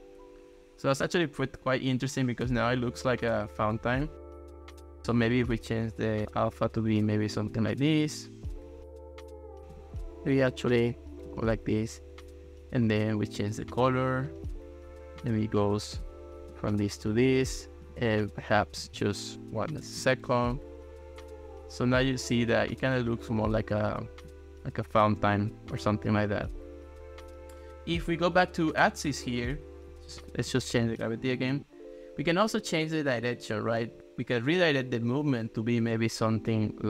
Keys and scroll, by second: 19.9 1, 20.0 Return, 29.8 1, 30.4 Return.